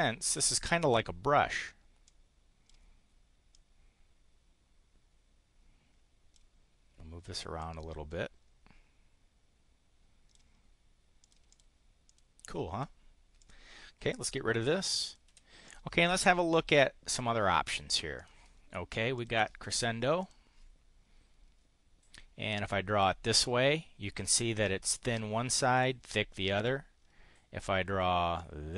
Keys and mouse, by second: 2.0 click, 3.5-6.4 drag, 7.6-10.5 drag, 11.2 click, 11.4 click, 11.9 click, 13.4 click, 14.2 Delete, 14.9 click, 15.2 Delete, 15.7 click, 18.1 click, 19.2 click, 20.2 click, 22.5 click, 28.3 click.